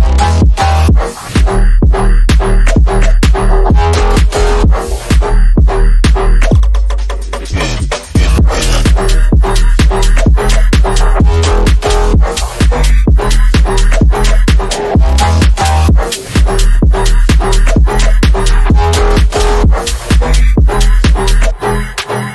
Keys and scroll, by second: 6.3 F3, 15.3 shift+F2, 15.5 Escape, 22.0 F3.